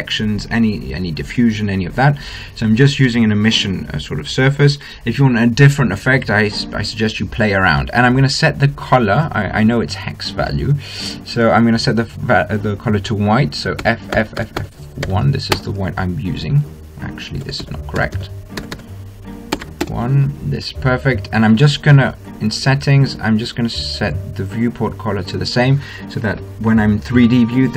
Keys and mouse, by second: 9.0-10.7 drag, 14.7 f, 15.1 f, 18.1 f, 18.7 f, 19.3 f, 23.1-24.5 drag, 26.1-27.7 middle drag.